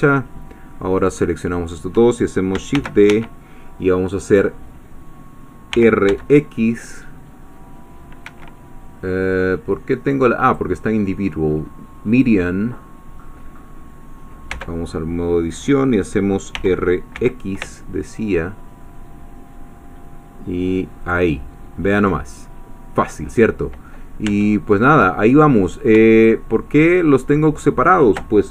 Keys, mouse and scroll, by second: 1.1 shift+click, 2.9 shift+d, 3.1 shift+Escape, 5.7 r, 6.1 x, 8.2 Escape, 10.4 click, 12.1 click, 14.5 Tab, 16.5 r, 17.3 x, 21.0 ctrl+click, 24.4 Tab, 26.2 shift+click, 27.2 shift+click.